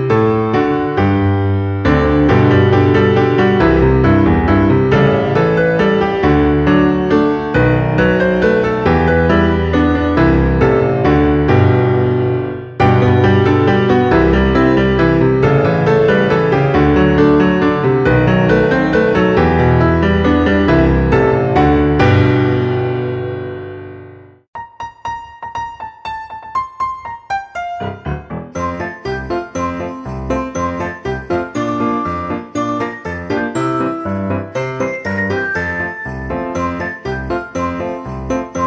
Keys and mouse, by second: 1.9 middle click, 3.1 shift+a, 4.7 click, 5.8 click, 7.3 click, 8.4 click, 9.9 click, 12.2 Tab, 12.7 a, 13.3 g, 13.7 y, 15.7 click, 16.2 a, 19.7 click, 21.3 o, 22.0 ctrl+a, 24.9 click, 25.8 ctrl+a, 26.9 click, 27.9 a, 28.4 g, 28.5 y, 29.6 click, 30.4 KP_7, 31.0 shift+middle click, 31.7 a, 32.6 shift+d, 33.7 right click, 34.7 ctrl+z, 36.4 click, 38.3 o.